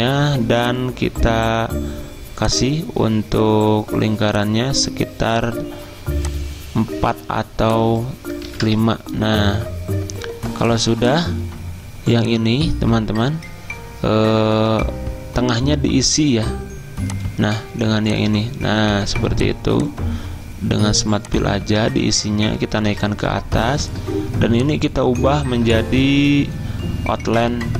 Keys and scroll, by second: 8.6 5, 8.7 Return, 22.0 ctrl+z, 22.9 ctrl+Home.